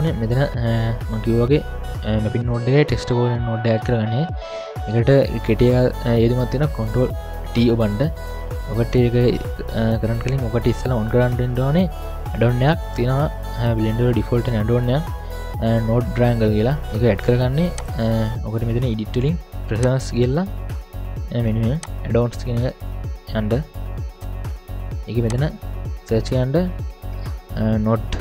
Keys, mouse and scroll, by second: 0.2-2.9 scroll down 5, 0.7-2.9 scroll up 1, 2.9-4.1 scroll down 1, 17.8-28.2 drag.